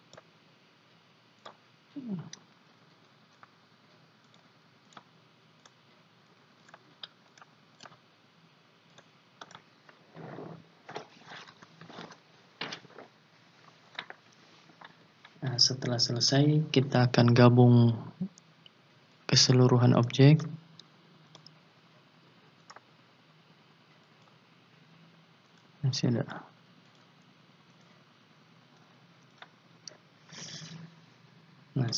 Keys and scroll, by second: 2.7 ctrl+z, 6.6 ctrl+z, 11.6 ctrl+z, 29.0 ctrl+z.